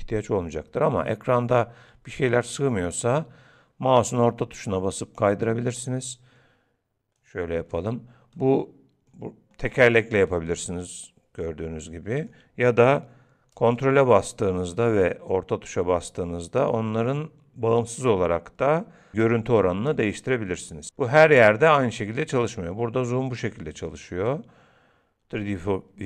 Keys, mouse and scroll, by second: 1.4 middle click, 7.2 click, 8.4 middle click, 9.1-9.8 scroll down 6, 9.6-10.3 scroll up 7, 10.3 middle click, 13.8 ctrl+middle click, 20.1 ctrl+middle click, 24.3 ctrl+middle click.